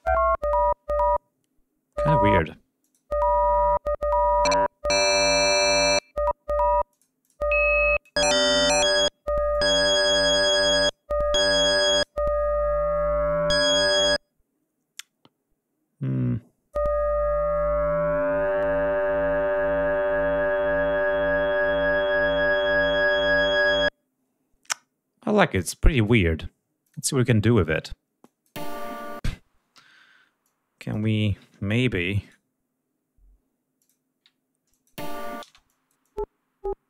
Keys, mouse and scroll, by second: 2.8 click, 4.4 click, 5.4 click, 6.9 click, 7.2 click, 8.0 click, 9.5 click, 11.3 click, 14.9 click, 26.8 click, 29.8 d, 30.4 click, 31.3 scroll down 2, 31.6 ctrl+scroll up 2, 32.2 ctrl+right click, 33.8 click, 34.7 click, 35.0 space, 35.3 ctrl+scroll up 2, 35.7 ctrl+click, 36.3 ctrl+click.